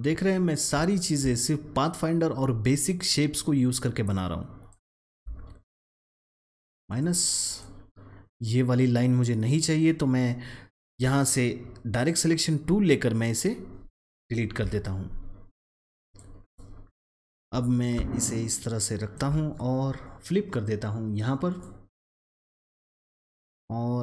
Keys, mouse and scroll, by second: 0.8-1.8 alt+scroll down 1, 4.0 click, 4.9 alt+scroll up 1, 6.8 click, 9.8 click, 10.8 a, 12.5-14.5 drag, 14.5 Delete, 16.0-24.0 drag.